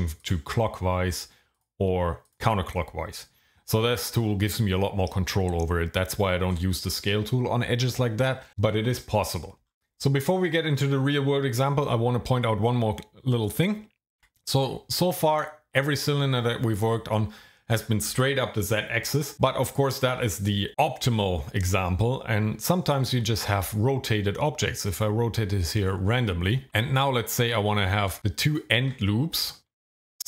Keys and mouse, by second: 1.7 click, 9.5 ctrl+z, 14.2 Delete, 14.5 click, 23.4 r, 23.5 r, 24.9 click, 26.7 Tab, 27.7 alt+click.